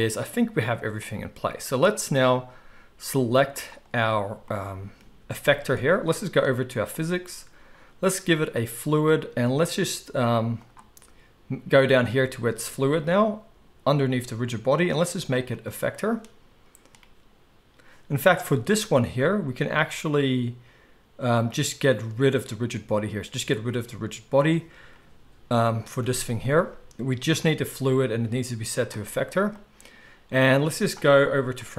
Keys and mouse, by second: 3.7 click, 3.8-8.5 middle drag, 5.2 g, 8.5-31.7 drag, 26.0 g.